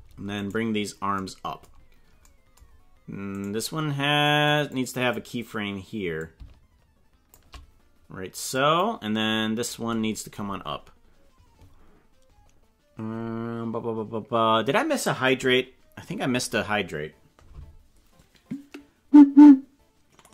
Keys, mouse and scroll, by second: 0.4 right click, 3.4 right click, 4.2 click, 4.6 click, 6.1-7.3 shift+drag, 8.5 click.